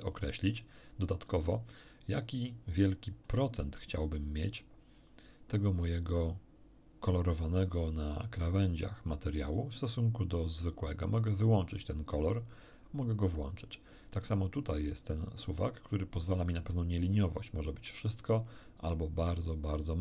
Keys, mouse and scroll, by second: 0.8 scroll down 1, 1.2-3.4 middle drag, 10.0-13.5 drag, 13.9 middle click, 15.4-20.0 drag.